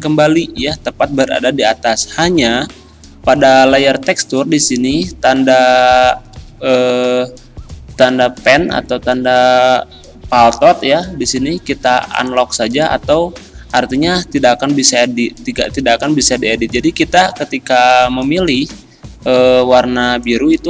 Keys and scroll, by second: 17.3 ctrl+z, 18.7 ctrl+z.